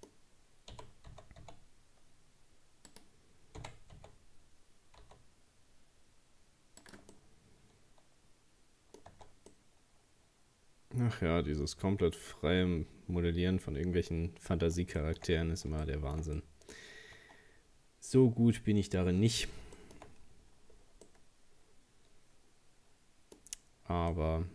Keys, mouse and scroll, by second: 0.7 g, 3.6 r, 7.1-9.2 middle drag, 9.2 Tab, 9.5-12.5 middle drag, 15.0 shift+middle click, 15.4 scroll down 1, 15.8-17.2 shift+middle drag, 17.2 Tab, 19.8 shift+middle click, 20.1-20.7 scroll up 1, 20.7 scroll down 3, 21.1-23.5 middle drag, 23.5-24.1 scroll up 2, 24.1-24.5 middle drag.